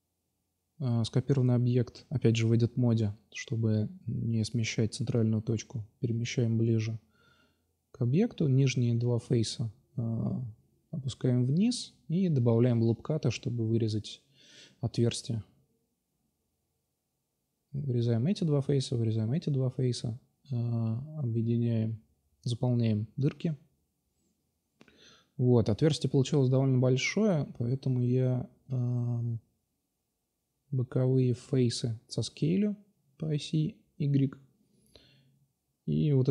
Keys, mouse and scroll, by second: 1.8 middle click, 1.8 click, 1.9-2.5 middle drag, 2.6-3.3 middle drag, 5.4 click, 7.2-8.4 drag, 8.8 ctrl+r, 12.9 ctrl+r, 14.0 ctrl+r, 14.7 ctrl+r, 16.4-18.0 drag, 17.1 x, 17.8 x, 20.2 2, 21.2-25.1 typing, 25.1 ctrl+n, 25.7-26.3 middle drag, 27.4-28.1 middle drag, 30.2-30.5 drag, 30.7-31.6 middle drag, 30.7 scroll up 1, 32.1 s, 34.4 middle click, 35.2 click, 35.4 ctrl+c, 35.8 ctrl+c.